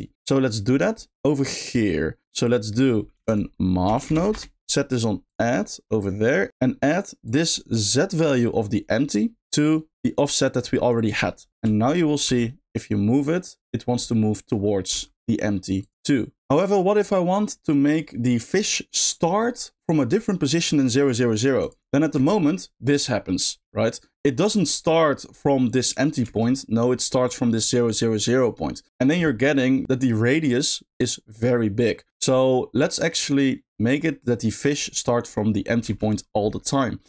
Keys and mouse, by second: 0.1-0.6 middle drag, 1.0 middle click, 2.4 click, 3.1 shift+a, 7.2-9.6 drag, 9.9-10.9 drag, 11.5 alt+g, 12.2 g, 14.9 g, 15.8 click, 21.6 click, 22.1 space, 26.2 space, 35.8 space, 36.6 middle click.